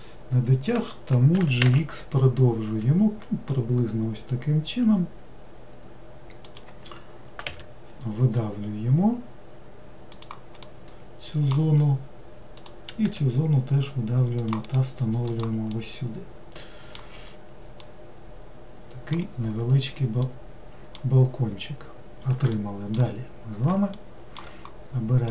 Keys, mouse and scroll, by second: 1.4 g, 7.5 e, 10.7-12.6 middle drag, 12.6 click, 13.1 e, 14.7 right click, 15.3 click, 15.8-17.2 middle drag, 17.2-17.8 scroll down 1, 17.8-21.6 middle drag, 21.6-22.6 scroll up 2, 22.6-25.3 shift+middle drag.